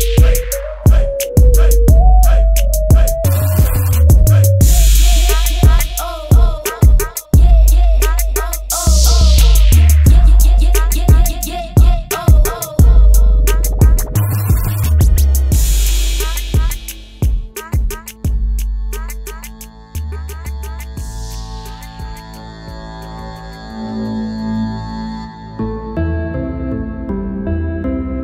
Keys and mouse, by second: 21.9 KP_0, 22.1 KP_0.